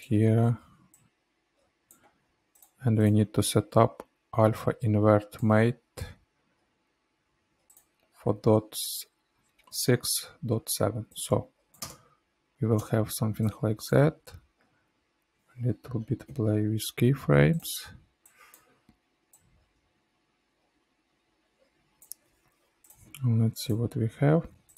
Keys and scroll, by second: 11.8 space, 16.2 F9.